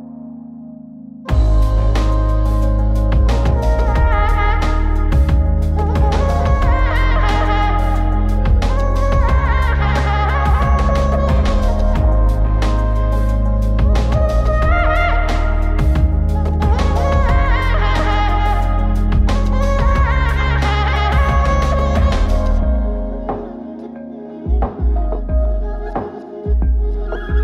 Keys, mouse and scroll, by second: 0.2-0.7 drag, 1.3 click, 2.6-4.1 middle drag, 5.9 click, 6.6 click, 8.1-9.1 middle drag, 12.1 click, 13.7 middle click, 20.7 click, 21.4 click, 22.2-22.8 middle drag, 24.4 click, 25.7-27.4 middle drag.